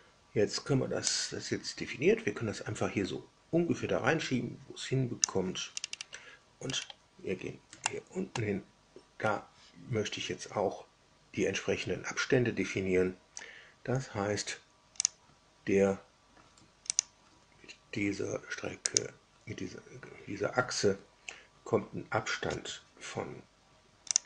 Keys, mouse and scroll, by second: 1.1-5.3 drag, 5.6-6.1 scroll up 2, 6.6-6.9 scroll up 2, 7.7 shift+middle click, 8.7 scroll up 2, 15.0 click, 16.8 ctrl+click, 18.8 click, 24.1 click.